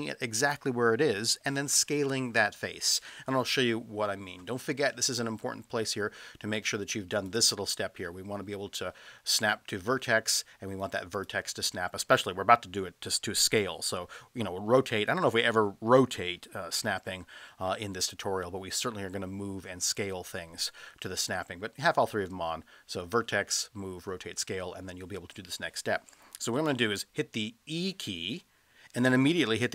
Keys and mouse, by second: 7.1-10.0 drag, 11.2-24.5 drag, 27.8 e.